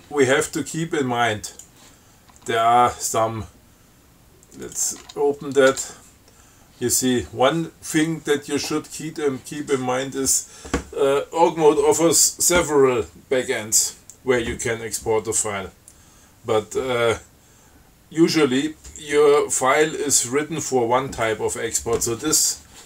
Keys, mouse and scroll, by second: 1.8 click, 2.7 Tab, 4.9 click, 5.3 Tab, 6.0 Tab, 6.8 scroll up 2, 8.5 scroll down 2, 9.2 scroll down 2.